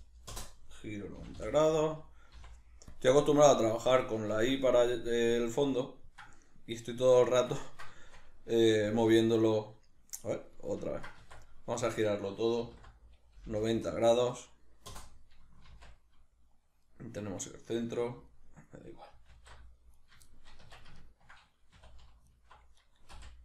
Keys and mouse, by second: 1.2 g, 3.0 click, 3.2-11.2 middle drag, 8.9 alt+q, 11.2 Tab, 11.8 a, 15.7 shift+c, 16.9 middle click, 19.3 alt+o, 19.3-19.9 middle drag, 19.9 right click, 20.2-22.2 shift+middle drag, 20.6 Tab, 21.7 2, 22.2 alt+right click, 23.1 v.